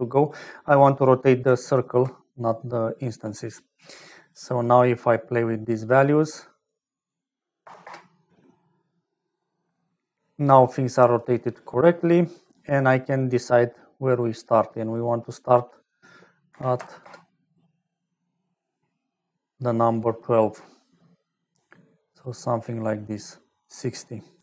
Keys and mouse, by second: 0.3 click, 1.5 alt+click, 4.0 click, 5.2-6.6 drag, 6.9-8.4 drag, 12.6-15.2 drag, 15.6-17.8 drag, 19.7-23.1 drag, 23.4-24.4 drag.